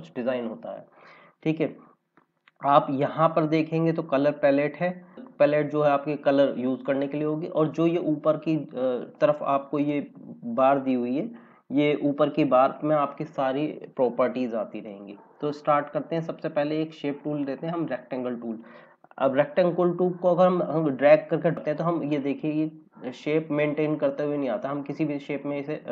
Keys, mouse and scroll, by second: 12.4 F5, 14.5 click, 17.1 click, 20.7 click.